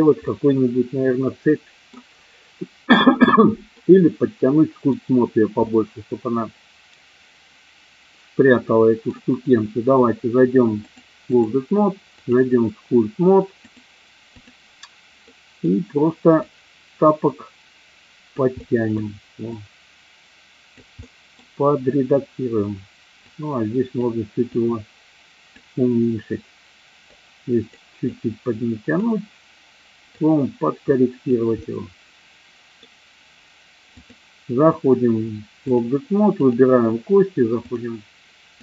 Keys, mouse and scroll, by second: 0.2-2.1 middle drag, 3.7-4.8 middle drag, 5.7-9.1 middle drag, 10.8 click, 12.2 click, 13.6 click, 15.2 middle click, 16.5-18.5 drag, 18.6 middle click, 19.5-20.8 drag, 20.9 middle click, 23.2 click, 24.4-25.8 drag, 27.0 click, 28.2-29.2 drag, 30.2-31.8 drag, 31.9 middle click, 34.0-35.8 drag, 36.4 click, 37.7-38.6 drag.